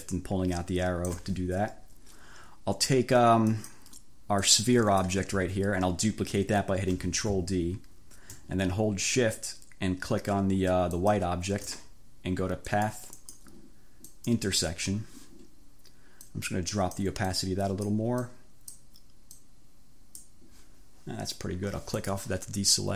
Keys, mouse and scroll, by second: 3.5 click, 4.5 click, 5.5 ctrl+z, 6.9 ctrl+d, 10.9 shift+click, 12.7 click, 13.3 click, 14.1 click, 16.4-17.3 scroll up 2, 17.4-18.2 scroll up 2, 18.3-19.1 scroll up 2, 19.5-20.5 drag, 22.1 click.